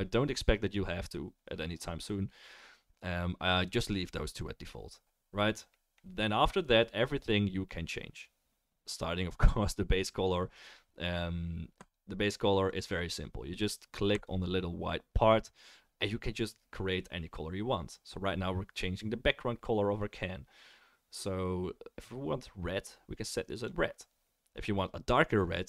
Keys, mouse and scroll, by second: 11.8 click, 14.1 click, 16.2-25.6 right drag.